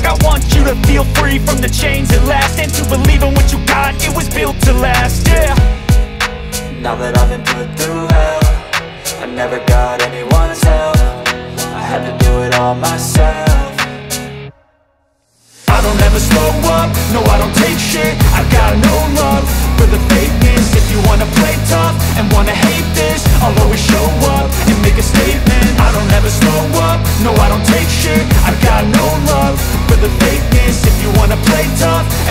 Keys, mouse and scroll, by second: 0.7 click, 1.9 g, 6.5 Escape, 12.0 click, 13.1 click, 14.1 click, 17.0 g, 21.9 Escape, 27.3-29.5 drag, 30.6 g, 31.1 x.